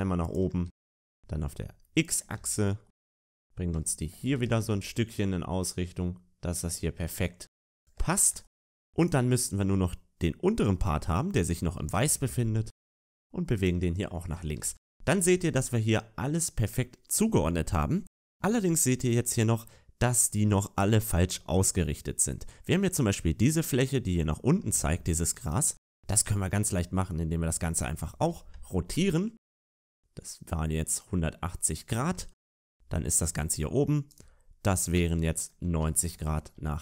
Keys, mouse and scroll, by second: 0.7 g, 4.2 shift+middle click, 4.2-5.1 scroll down 2, 8.9 shift+middle click, 8.9 right click, 8.9-9.6 scroll down 4, 9.6 middle click, 11.8-12.2 scroll up 3, 11.8 g, 14.3 scroll down 6, 14.3 a, 14.5 a, 17.6 shift+middle click, 17.6 scroll up 2, 18.3 scroll up 1, 18.6 middle click, 20.5 middle click, 22.3 middle click, 23.3 right click, 24.1 middle click, 24.5 a, 24.7 a, 25.3 right click, 27.8 scroll up 2, 27.8 r, 32.3 a, 32.4 a, 33.2 middle click, 34.0 right click, 36.5 shift+middle click, 36.5 r.